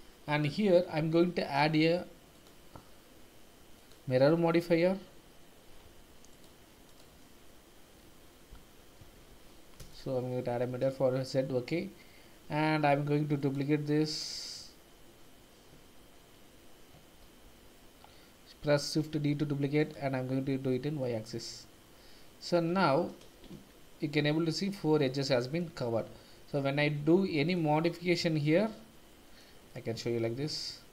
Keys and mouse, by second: 2.3 click, 3.9-5.6 drag, 5.8 Escape, 6.4-9.9 drag, 13.4 click, 14.1 click, 17.4 shift+d, 19.8 click, 21.0-22.5 middle drag, 22.8 shift+z, 23.5 Tab, 24.9 middle click, 25.8 Tab, 26.1 middle click, 27.5-28.7 drag, 28.7 middle click, 29.7 middle click, 30.3 g.